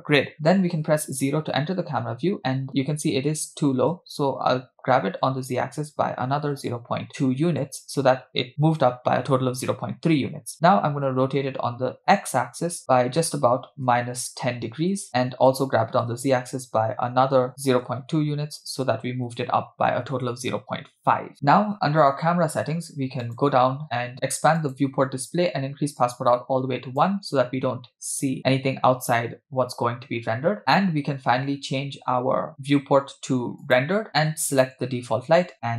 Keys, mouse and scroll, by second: 0.9 KP_0, 4.0 g, 10.5 r, 15.5 g, 23.2 click, 24.6 click, 25.1-25.9 scroll down 2, 26.0-27.1 drag, 29.5 scroll down 1, 33.9-34.7 drag.